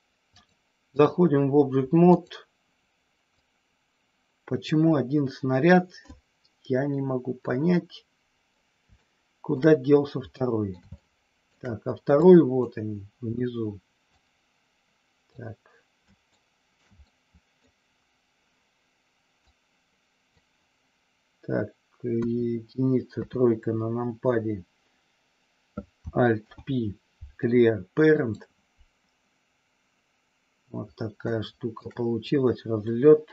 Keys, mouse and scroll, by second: 0.3 click, 2.0 click, 3.3-4.5 drag, 7.4-8.5 middle drag, 8.9 shift+middle click, 10.4 middle click, 10.6 scroll down 1, 10.9 shift+middle click, 12.2 click, 14.0-15.3 drag, 16.3 shift+middle click, 17.0 middle click, 17.5 scroll down 1, 19.5 click, 22.2 KP_1, 23.0 KP_3, 26.3 alt+p, 31.3 shift+middle click.